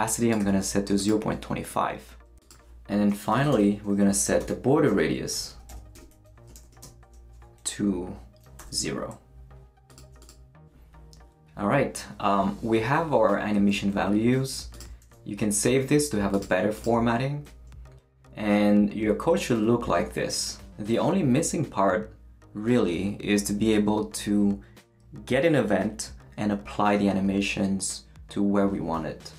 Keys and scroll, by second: 0.4 2, 3.3 ,, 3.5 Return, 4.4-8.6 typing, 6.5 shift+Return, 15.0 super+s.